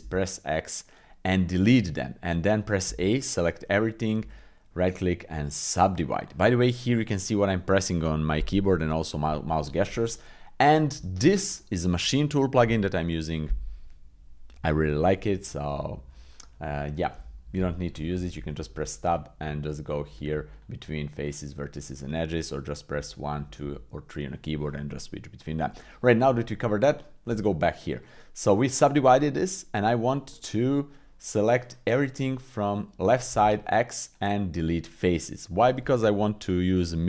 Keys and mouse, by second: 0.0 x, 1.4 click, 2.8 a, 4.2 w, 10.9 Tab, 18.7 Tab, 21.3 click, 22.9 1, 23.3 2, 23.6 3, 25.7 Escape, 26.2 Tab, 27.2 Tab, 27.9 click, 29.0 middle click, 30.3 middle click, 30.8 middle click, 31.6 click, 33.3 x, 34.7 middle click, 36.7 click.